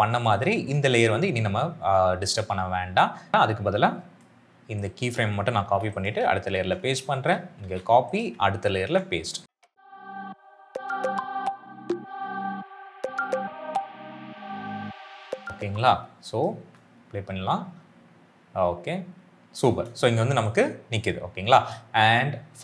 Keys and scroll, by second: 5.6 ctrl+c, 6.4 ctrl+v, 7.5 ctrl+c, 8.6 ctrl+v, 9.5 ctrl+c, 9.8 ctrl+v, 10.1 ctrl+c, 10.3 ctrl+v, 10.7 ctrl+c, 10.8 ctrl+v, 11.6 ctrl+v, 11.9 ctrl+v, 12.2 ctrl+c, 12.4 ctrl+v, 12.9 ctrl+c, 13.3 ctrl+z, 13.6 ctrl+c, 13.8 ctrl+v, 14.0 ctrl+c, 14.3 ctrl+v, 14.7 ctrl+c, 15.0 ctrl+v, 15.1 ctrl+c, 15.4 ctrl+v, 16.5 space, 19.5 space.